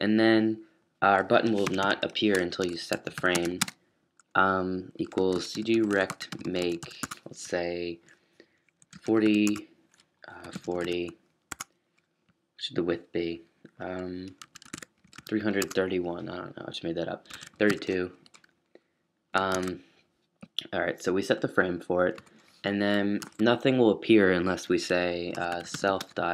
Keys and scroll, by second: 0.6-7.3 typing, 8.5-11.5 typing, 12.7-15.6 typing, 17.0-20.0 typing, 21.7 typing, 24.9-26.3 typing.